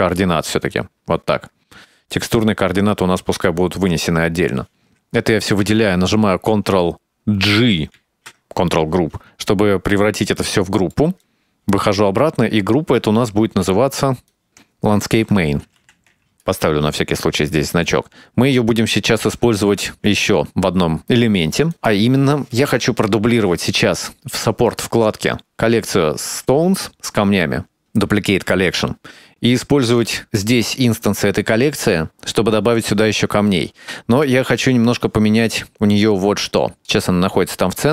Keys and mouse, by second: 0.0 click, 0.6 shift+right click, 2.5 right click, 3.5 middle click, 4.5 right click, 8.1 ctrl+g, 10.4 middle click, 11.2 click, 11.4 click, 11.6 Tab, 12.6 click, 13.0 click, 13.4 KP_Decimal, 14.2-16.0 drag, 16.3 click, 17.9-19.0 drag, 19.4 ctrl+space, 20.8 ctrl+s, 21.8 click, 25.0 click, 27.8-32.3 right drag, 34.2 click.